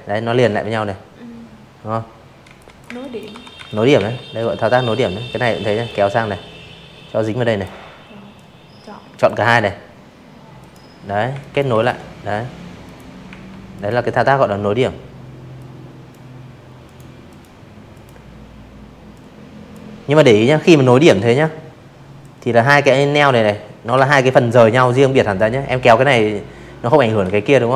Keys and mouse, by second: 0.0-1.4 typing, 0.6 click, 2.3 click, 2.8-4.6 drag, 5.3 click, 7.6 click, 8.2 z, 8.3 click, 8.7 v, 8.8 click, 9.8 click, 10.2 a, 10.7 click, 12.5 click, 13.8 click, 14.2 click, 14.9 click, 16.1-16.6 drag, 17.6 ctrl+z, 17.9 a, 19.2 click, 20.9 ctrl+z, 22.3 click, 24.2 ctrl+z, 25.0 click, 26.5 click.